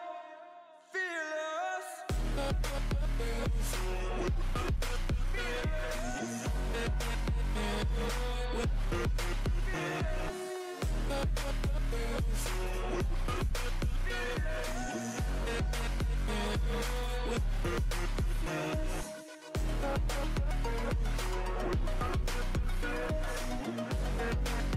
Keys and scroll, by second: 1.8 ctrl+z, 1.9 ctrl+z, 11.4 ctrl+z, 12.1 ctrl+t, 14.5 ctrl+t, 16.8 ctrl+z, 23.9 ctrl+z, 24.0 ], 24.0 ], 24.7 ctrl+z.